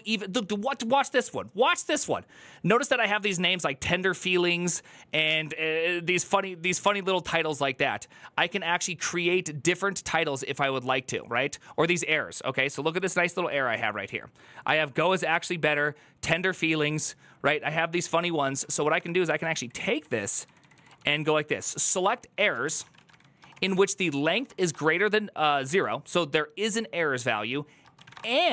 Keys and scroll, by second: 18.5 ctrl+c, 18.6 ctrl+c, 18.8 Up, 19.2 Left, 19.4 Left, 20.2 Left, 20.4 Left, 20.5 Left, 20.8 ctrl+w, 20.9 ctrl+w, 21.2 ctrl+w, 21.9-25.5 typing, 27.5-28.5 typing.